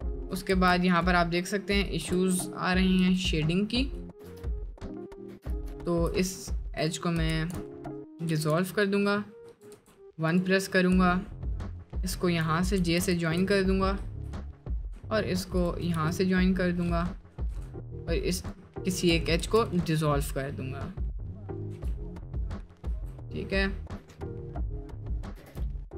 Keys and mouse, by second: 0.5 ctrl+r, 2.3 ctrl+z, 3.1 Tab, 3.6 middle click, 4.1 shift+click, 4.2 Tab, 5.3 2, 5.8 ctrl+z, 7.5 ctrl+x, 8.5 ctrl+x, 9.0 Tab, 9.4 Tab, 9.8 1, 12.9 j, 13.6 middle click, 16.1 j, 17.0 middle click, 17.4 2, 19.5 ctrl+x, 20.3 middle click, 21.8 Tab, 22.9 Tab, 22.9 middle click, 23.9 middle click, 24.6 middle click, 25.5 shift+Tab, 25.5 shift+middle click.